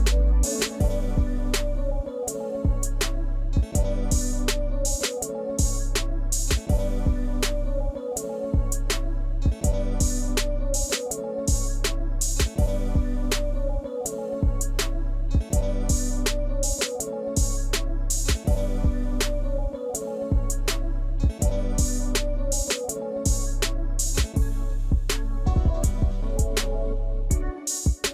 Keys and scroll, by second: 5.7 ctrl+d, 6.6 ctrl+d, 7.1 ctrl+d, 7.7 ctrl+d, 8.2 ctrl+d, 8.7 ctrl+d, 9.3 ctrl+d, 9.8 ctrl+d, 10.4 ctrl+d, 10.9 ctrl+d, 11.5 ctrl+d.